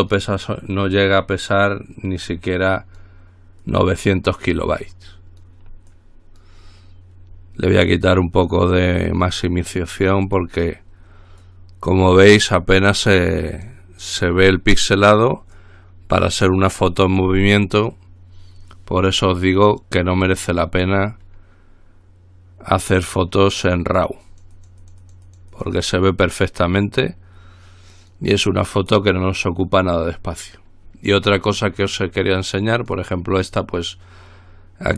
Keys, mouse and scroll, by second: 1.1-2.3 drag, 2.5-3.7 drag, 3.8-5.0 drag, 6.1 click, 8.7-11.1 drag, 11.6-13.2 drag, 13.3-14.4 drag, 14.5-15.7 drag, 15.9-17.4 drag, 19.8-20.3 scroll down 2, 20.4-21.1 scroll up 2, 24.5-26.6 drag, 26.9-28.8 drag, 33.0 click.